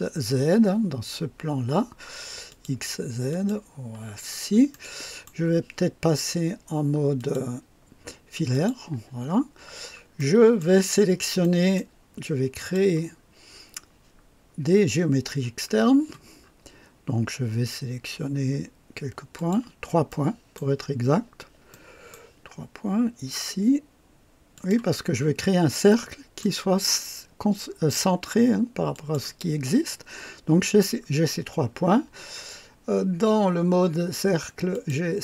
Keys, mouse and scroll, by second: 2.5 click, 3.3 click, 4.2 scroll up 2, 4.7-5.5 right drag, 7.2 click, 8.5 click, 9.2 scroll up 2, 9.7 scroll down 2, 10.2-10.8 right drag, 10.9 scroll up 2, 11.4 right click, 12.6 click, 16.4-16.7 scroll up 2, 19.3 click, 20.1 right click, 21.7 right click, 24.5 click, 25.3-25.7 scroll down 2, 25.9 right click, 28.9 click, 29.8 scroll down 1, 30.4-31.1 scroll down 2, 34.7 click.